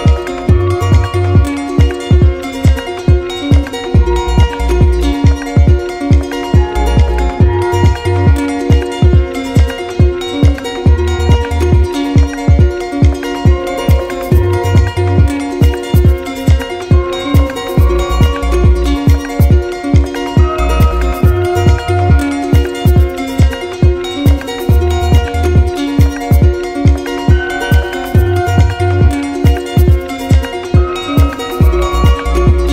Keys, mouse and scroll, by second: 2.6 click, 3.7 alt+click, 4.9 click, 6.3 click, 8.1 click, 8.3 ctrl+z, 9.4 click, 10.9 click, 12.4 click, 13.1 click, 13.5 shift+click, 13.7 shift+click, 15.9 click, 16.9 ctrl+z, 18.6 click, 20.0 click, 21.1 alt+click, 22.6 z, 23.5 click, 25.3 click, 26.3 click, 28.3 alt+click, 28.5 alt+click, 30.1 right click.